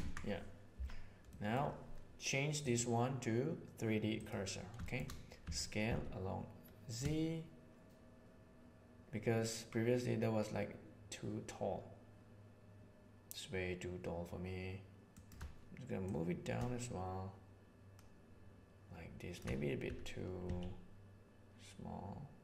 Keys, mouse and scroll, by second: 1.3 middle click, 2.5 click, 2.8-4.2 middle drag, 5.3 s, 15.9-17.5 drag, 17.5-19.3 shift+middle drag, 19.7 s.